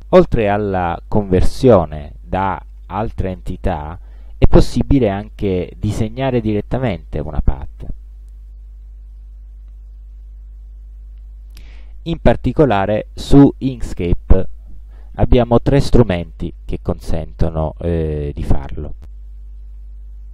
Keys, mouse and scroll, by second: 8.5 click, 9.2 shift+click, 9.9 shift+click, 10.9 shift+Delete, 11.9-12.3 scroll up 2, 12.4 scroll down 2, 12.9 ctrl+scroll up 2, 13.8 ctrl+click, 14.4 ctrl+scroll up 2, 15.1 ctrl+click.